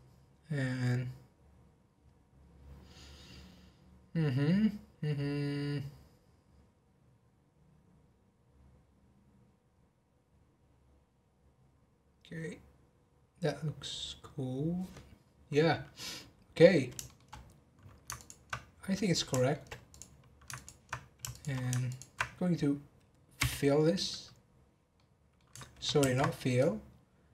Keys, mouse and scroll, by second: 16.0 scroll down 1, 16.6-17.3 middle drag, 17.3 scroll up 1, 18.1 ctrl+click, 19.3 shift+middle click, 19.9 click, 20.5 ctrl+click, 21.3 shift+click, 21.8 ctrl+click, 23.4 f, 24.9-26.0 middle drag, 26.0 ctrl+z.